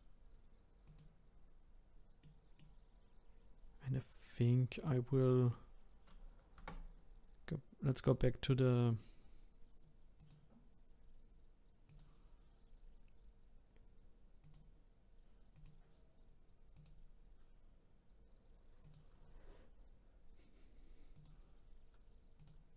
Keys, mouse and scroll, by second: 0.8 click, 2.2-4.7 middle drag, 4.7 click, 6.5 Tab, 8.0 click, 10.6-12.0 drag, 14.4 click, 15.5 click, 16.7 click, 18.8 click, 21.1 click, 22.4 click.